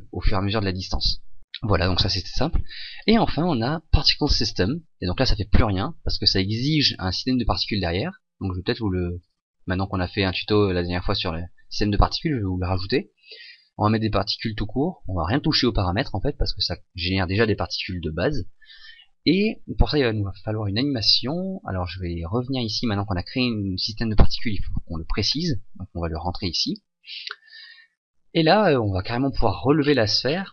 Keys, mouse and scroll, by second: 21.9 click, 27.1 click, 28.8 click, 29.8-30.2 scroll down 1.